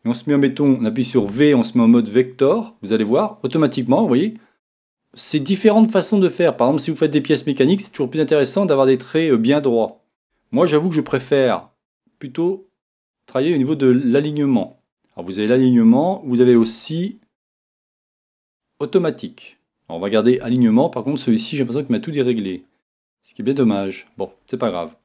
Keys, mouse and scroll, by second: 1.2 v, 4.0-11.1 middle drag, 11.1 v, 16.5 v, 20.4 v, 22.3-25.0 middle drag, 23.5-23.8 scroll up 2.